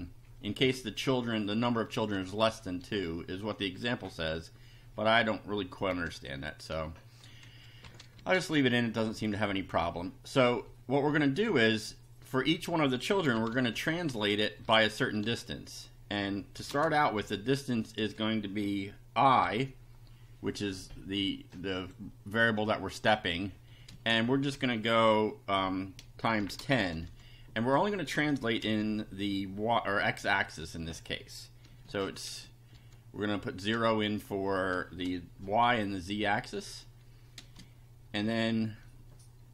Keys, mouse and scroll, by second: 5.9 Return, 7.5 Down, 7.8 Home, 8.2 Tab, 8.5 Up, 12.9-18.0 typing, 19.4 i, 21.5 click, 23.2 click, 23.9 space, 26.2-28.6 typing, 30.6 0, 31.7 space, 31.8 ,, 32.3 space, 32.7 0, 34.8 space, 35.6 ], 37.4 space.